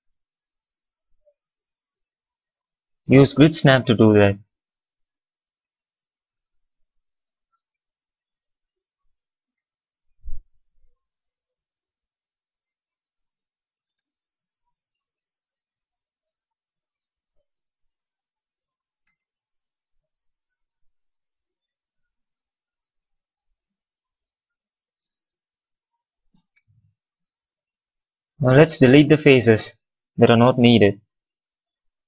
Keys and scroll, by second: 11.1 x, 13.7 space, 18.9 space, 23.8 x, 24.8 space, 26.6 q, 30.7 Delete.